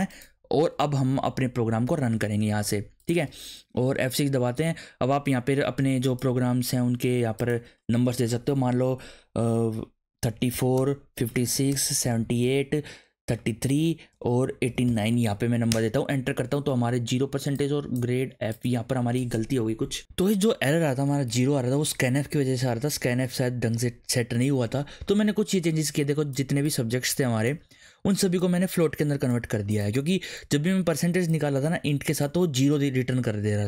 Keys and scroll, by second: 1.0 BackSpace, 2.5 ctrl+s, 10.1-15.3 typing, 15.7 Return.